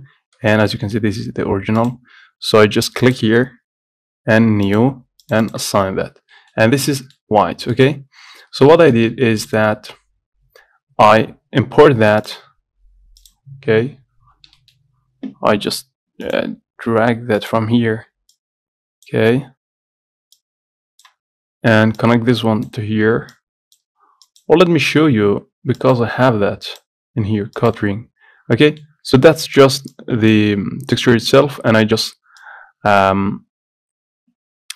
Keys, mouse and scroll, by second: 0.2-0.7 scroll up 1, 0.7 shift+middle click, 1.3 Tab, 6.2-6.5 scroll down 1, 6.5-7.6 middle drag, 7.6 scroll down 1, 7.9 shift+middle click, 8.4-8.9 scroll down 1, 8.9 shift+middle click, 9.2 Tab, 13.5 click, 22.8-31.3 drag.